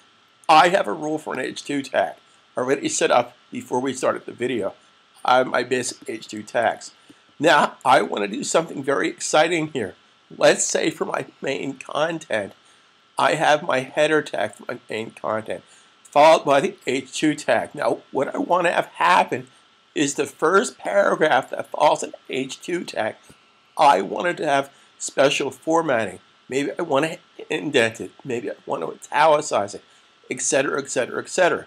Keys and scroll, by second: 6.4 super+s.